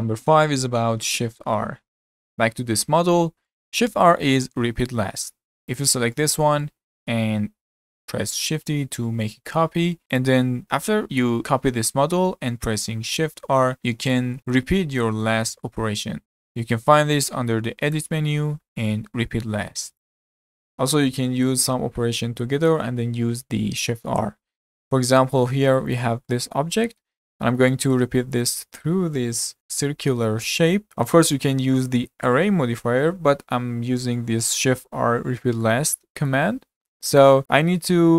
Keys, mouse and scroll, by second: 3.5-5.7 shift+middle drag, 5.7 click, 6.2-8.6 shift+middle drag, 8.6 shift+d, 10.9-13.3 shift+middle drag, 13.3-14.6 typing, 16.5-17.9 middle drag, 17.9-19.9 drag, 25.9 click, 26.3-29.4 middle drag, 30.9-33.8 middle drag, 35.6-36.6 middle drag, 36.6-37.1 scroll up 1, 37.1-37.7 shift+middle drag, 37.7-38.1 scroll up 1.